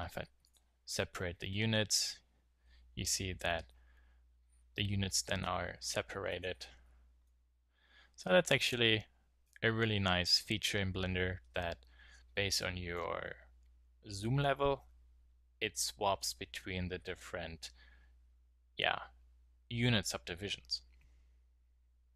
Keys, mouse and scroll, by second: 0.4-2.2 drag, 2.2 middle click, 6.3-7.6 drag.